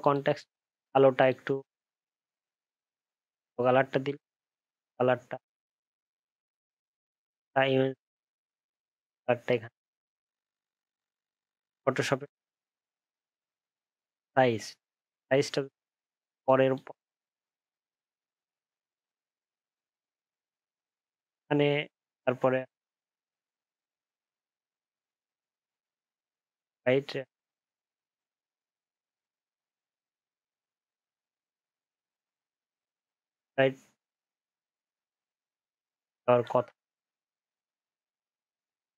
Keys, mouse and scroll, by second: 33.1 alt+scroll up 1, 33.5 alt+scroll down 1, 34.3-34.9 alt+scroll up 9, 35.6 alt+scroll down 5, 38.3 alt+scroll up 1.